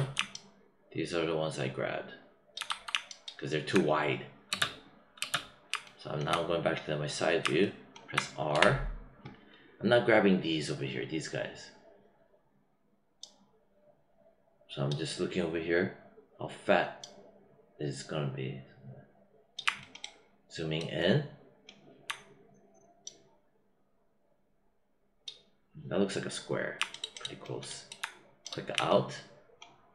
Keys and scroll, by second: 4.4 space, 8.4 r.